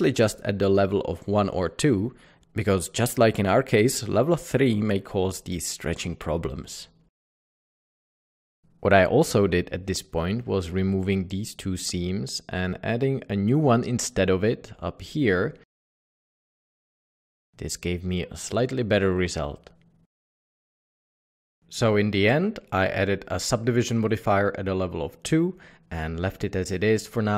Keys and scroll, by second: 2.0 alt+a, 2.4 Tab, 7.2 Tab, 11.4-12.0 typing, 16.0 typing, 17.8 Tab, 18.6 alt+a, 20.8 Escape, 23.7 Escape, 23.9 ctrl+2.